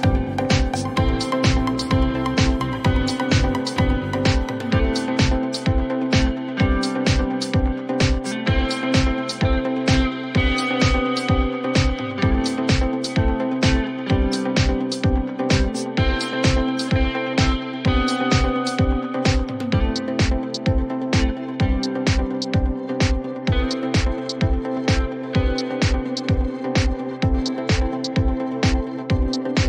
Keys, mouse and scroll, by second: 1.1 click, 3.3 click, 4.8 click, 6.9 click, 7.5 0, 7.9 Return, 9.5 click, 9.5-11.8 typing, 12.4 click, 13.0-13.4 typing, 16.2-18.9 drag, 19.4-20.5 drag, 20.0-22.3 typing, 23.8 click, 23.9 click, 26.9 click, 27.1-28.1 typing.